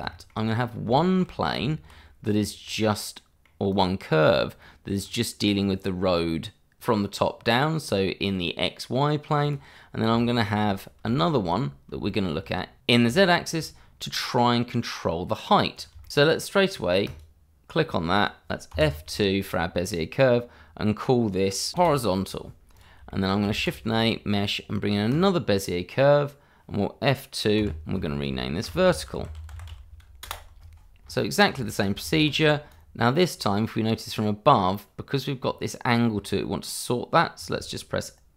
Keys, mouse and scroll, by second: 0.1 shift+middle click, 0.5 scroll up 1, 0.9 shift+middle click, 1.5 Tab, 2.4 scroll down 1, 2.6 middle click, 3.6 click, 4.0 scroll down 1, 4.3 middle click, 4.6-5.5 scroll up 1, 5.5 middle click, 6.8 click, 7.3-7.9 scroll down 1, 9.9-10.2 scroll down 1, 10.2 shift+middle click, 12.1 shift+middle click, 12.7 scroll down 1, 13.0 shift+middle click, 13.2 scroll up 1, 13.5 shift+middle click, 13.8-15.5 scroll up 1, 15.5 click, 15.8 middle click, 15.9 scroll up 1, 16.1 Escape, 17.0 click, 18.7 F2, 21.9 o, 22.1 z, 22.5 a, 22.7 Return, 22.9 click, 23.1 shift+middle click, 23.5 shift+a, 25.1 click, 28.8-29.7 typing, 30.2 Return, 31.4 shift+z, 31.7 shift+middle click, 32.0-32.3 scroll up 1, 32.8 click, 35.3-36.1 scroll down 1, 36.1-37.9 scroll up 1.